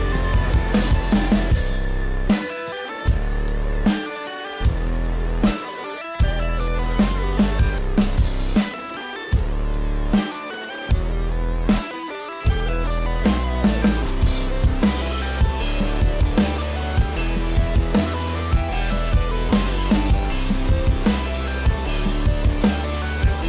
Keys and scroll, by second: 0.4 ctrl+=, 0.4 ctrl+=, 0.8 space, 1.9 ctrl+=, 2.2 space, 7.6 ctrl+d.